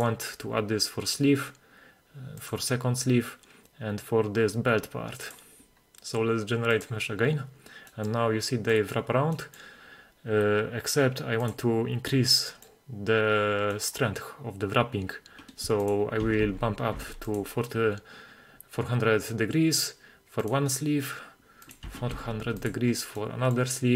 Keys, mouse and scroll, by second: 0.0 click, 2.4 click, 5.3 click, 6.8 click, 7.9 middle click, 8.8 middle click, 9.4 middle drag, 11.6 click, 12.5 middle drag, 13.8 middle click, 15.2-15.8 scroll down 1, 15.8 scroll down 2, 15.8-17.4 drag, 16.5 4, 19.4-20.5 scroll up 3, 20.5 click, 20.5 scroll up 1, 20.8-21.7 scroll down 3, 21.7-22.8 drag, 22.2 4, 23.2-23.6 middle drag.